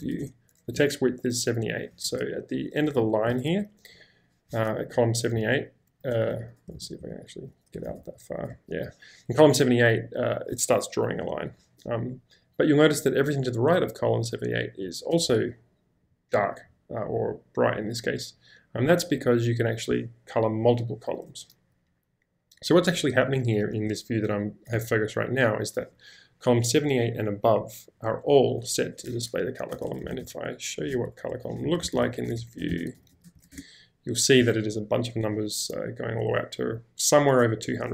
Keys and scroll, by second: 2.0 shift+4, 3.0 j, 4.9 l, 5.4 k, 6.8 ctrl+v, 7.0-7.9 typing, 29.6-32.7 typing, 31.1 Escape.